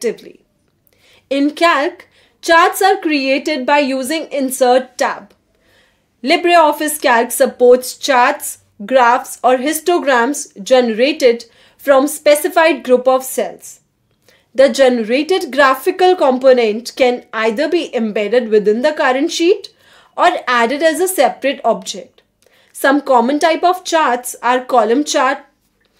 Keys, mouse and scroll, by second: 8.3 click, 10.4 click, 14.3 click, 16.8 click, 19.1 click, 22.4 click, 23.7-25.9 typing.